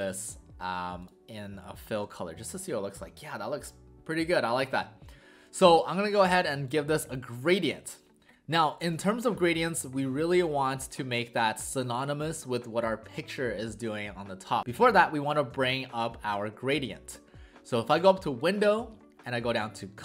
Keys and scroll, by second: 2.0 w, 5.6 w.